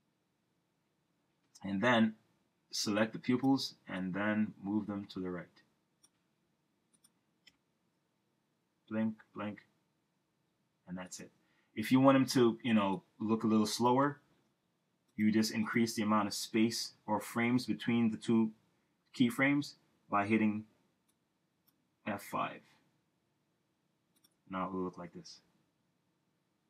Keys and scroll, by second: 7.5 Return, 14.1 Return, 22.6 F5.